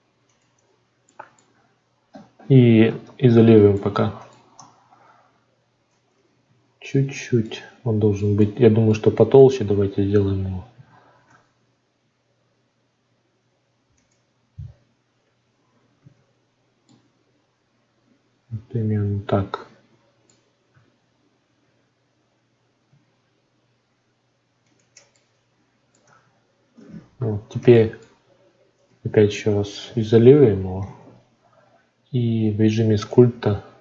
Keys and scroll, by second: 4.5 Tab, 6.4 a, 11.1 alt+s, 21.6 alt+s, 26.0 Tab.